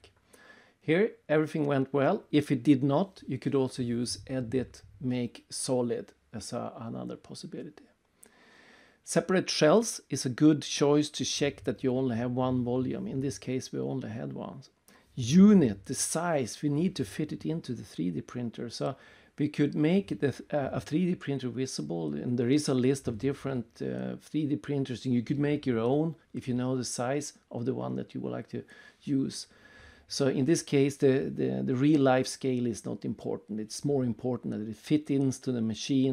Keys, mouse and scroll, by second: 0.2 click, 0.6 right click, 2.0 click, 2.4 click, 6.3 click, 8.4 click, 9.0 right click, 10.2 click, 11.2 click, 11.8 right click, 15.2 click, 15.8 middle click, 16.3 click, 16.6 right click, 17.1 middle click, 18.9 click, 21.0 click, 22.1 click, 22.5 middle click, 24.0 click, 25.0 click, 25.4 click, 26.0 middle click, 26.4 right click, 27.4 click, 28.0 middle click, 28.8 click, 29.8 middle click, 30.3 scroll down 3, 31.2 click, 32.3 middle click, 34.3 right click, 34.9 middle click, 35.6 click.